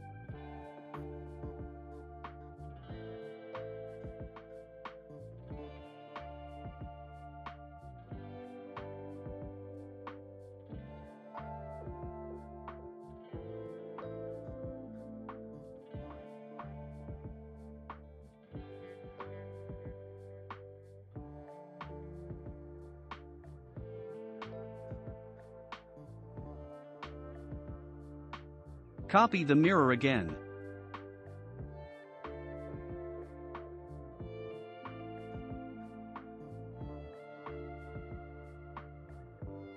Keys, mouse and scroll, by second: 1.3-1.7 scroll up 2, 1.7-3.3 shift+middle drag, 3.3 ctrl+r, 12.2 s, 14.4 ctrl+r, 16.5 ctrl+s, 19.5 click, 20.1 Tab, 20.4 click, 21.0 scroll down 2, 21.4 click, 21.9 ctrl+a, 23.0 click, 23.5 scroll down 1, 24.0 scroll down 2, 24.0-26.0 shift+middle drag, 26.0 scroll, 26.1-26.8 scroll up 1, 27.4 click, 27.4 scroll up 1, 28.1 click, 30.2 ctrl+l, 32.9 click, 35.3 click, 36.1 scroll down 2, 37.0-39.7 shift+middle drag.